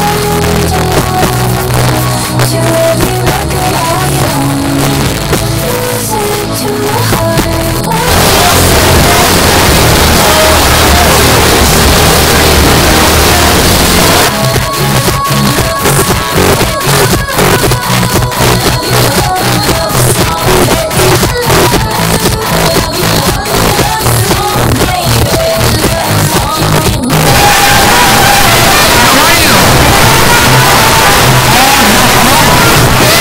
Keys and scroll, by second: 0.1 Return, 14.2 Page_Down.